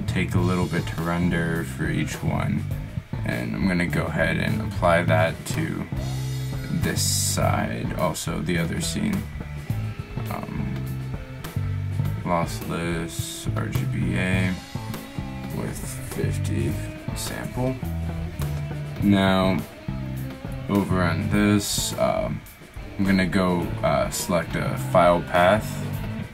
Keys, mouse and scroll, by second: 5.3 middle click, 12.5-17.6 middle drag, 21.0-22.1 middle drag.